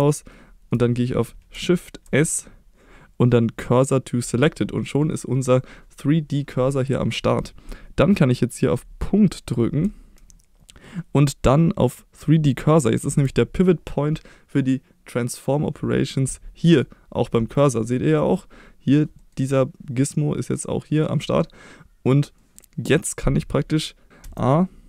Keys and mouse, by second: 0.4-1.5 shift+middle drag, 2.0 shift+s, 4.7 middle drag, 16.6 middle click, 17.9 middle click, 19.1 middle drag, 22.3 middle click, 24.1 s, 24.2 a.